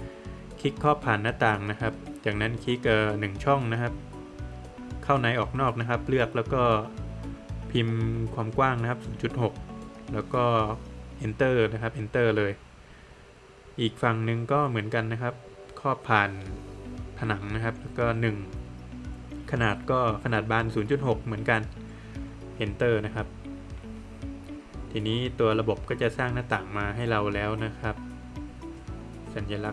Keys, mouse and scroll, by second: 2.7 Return, 7.3 Return, 10.1 Return, 13.0 middle click, 15.1 click, 15.2 click, 18.6 Return, 20.8 Return, 22.1 scroll down 1, 22.4 middle click, 23.3 Escape, 24.3 Escape, 24.3 scroll up 1, 24.8 middle click, 25.6 space, 26.3 Escape, 26.7 middle click, 27.5 click, 27.8 double click, 28.2 Escape, 28.5 click, 28.7 double click, 28.9 Escape, 29.1 click, 29.5 click.